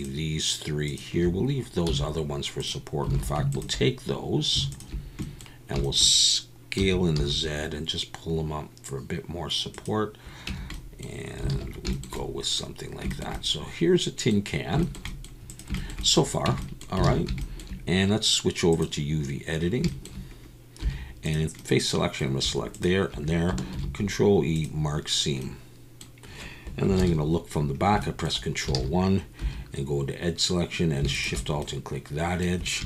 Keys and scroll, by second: 1.8 x, 3.1 alt+a, 6.8 s, 7.1 z, 10.5 Tab, 11.5 alt+a, 16.5 Tab, 17.0 alt+a.